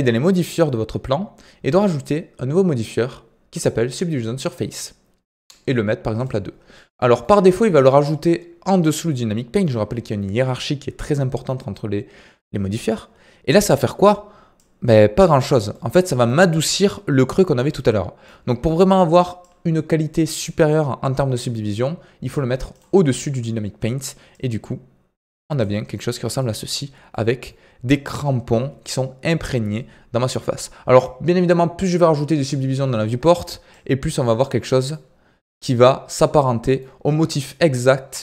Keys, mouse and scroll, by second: 1.6-6.7 drag, 6.7-19.4 middle drag, 19.4-25.7 drag, 25.7 scroll up 3, 25.9-26.3 middle drag, 26.3-27.1 scroll up 1, 27.1-30.1 middle drag, 32.4 click, 32.7-33.7 scroll down 2, 33.7-34.6 drag, 34.6 middle drag, 34.9-36.2 scroll up 4, 36.2 scroll down 3, 36.4-36.9 middle drag, 36.9-38.2 scroll down 1.